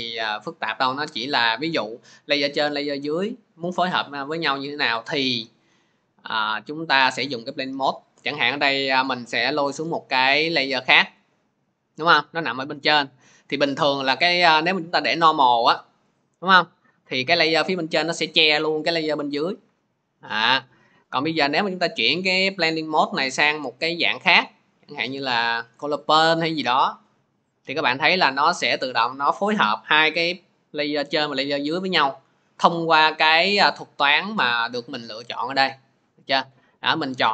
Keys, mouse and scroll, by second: 2.4 click, 3.1 click, 4.4 click, 6.3 click, 11.1 middle click, 13.8 middle click, 16.0 click, 17.7 scroll, 17.8 click, 21.7 click, 25.0 click, 30.1-31.2 middle drag, 34.6-37.3 drag.